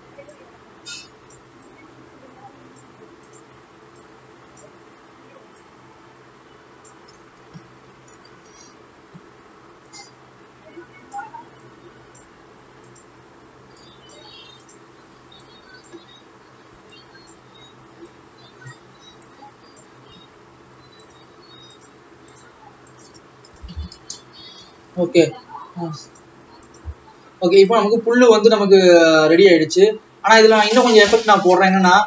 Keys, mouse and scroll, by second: 6.4-8.3 drag, 8.3 alt+a, 8.5 ctrl+s, 10.1-13.2 drag, 14.8 click, 16.9-25.1 drag, 25.1 alt+a, 26.1-27.2 drag, 30.3 ctrl+s, 30.4 scroll down 5.